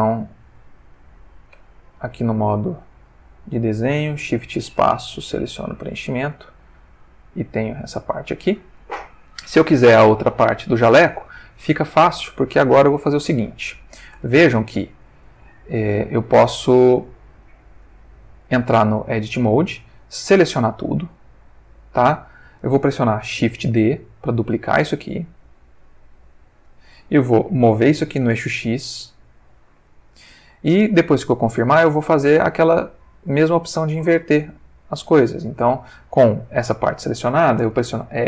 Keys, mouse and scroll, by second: 1.6 Tab, 2.6 ctrl+Tab, 3.5 ctrl+click, 4.3 shift+space, 5.4 click, 6.3 click, 14.1 Tab, 15.4-17.8 ctrl+middle drag, 20.2 a, 21.0 g, 22.0 Escape, 24.3 shift+d, 28.2 x, 29.9 click, 30.8 ctrl+middle click, 33.6-35.6 ctrl+middle drag.